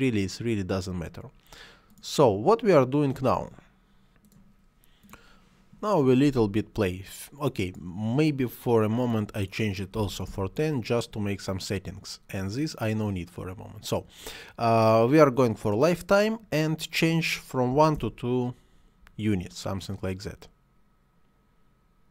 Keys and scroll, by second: 9.8 1, 10.1 Return, 17.5 2, 17.8 Return.